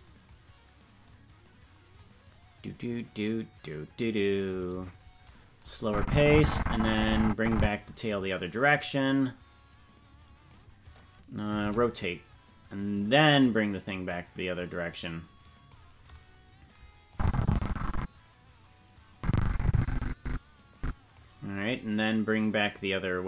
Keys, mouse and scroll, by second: 0.0 click, 1.0 click, 2.6-4.5 drag, 5.8-7.7 drag, 8.7-10.5 drag, 12.9-15.7 drag, 17.1-21.2 drag, 22.7-23.2 drag.